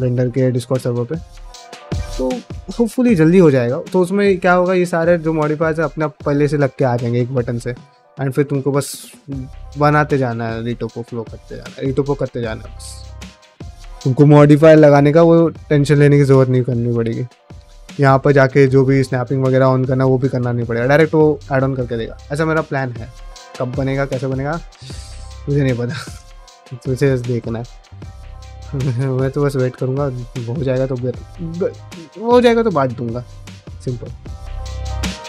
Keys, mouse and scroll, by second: 0.2 middle click, 0.9 middle click, 12.7 middle click, 13.8 shift+middle click, 14.2 middle click, 15.0 ctrl+middle click, 15.3 shift+middle click, 16.0 click, 16.2 g, 16.6 click, 16.8 g, 17.2 middle click, 19.4 shift+middle click, 19.7 middle click, 20.2 shift+middle click, 21.1 middle click, 29.0 middle click, 29.5 middle click, 30.2 click, 31.3 g, 32.1 click, 32.3 g, 34.2 middle click, 34.7 click, 34.8 g.